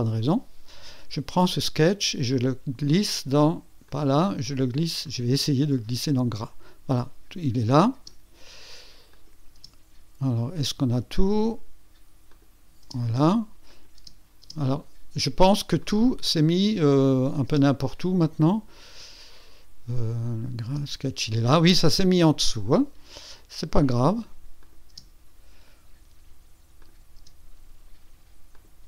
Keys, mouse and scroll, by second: 0.2 Delete, 1.7-3.0 drag, 3.9 click, 5.0-6.4 drag, 7.9 space, 9.1 click, 9.5 space, 11.2 click, 11.7 click, 12.3 click, 12.8 space, 13.7 click, 14.0 space, 15.8-17.2 drag, 17.5 space, 19.0 click, 20.7 space, 23.8 click, 24.6 click, 24.9 space, 26.8 click, 27.2 space, 28.5 click.